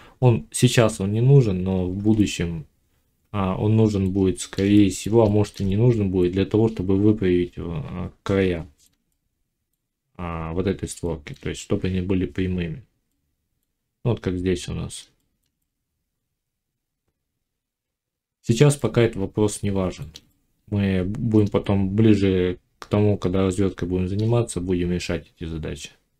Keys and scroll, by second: 25.4 Tab.